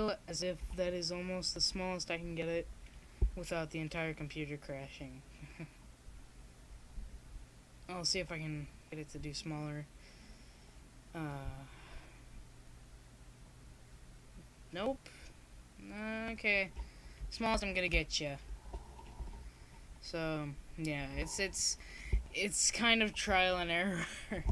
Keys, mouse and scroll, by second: 5.4-7.5 drag, 7.1 shift+s, 10.1-14.2 drag.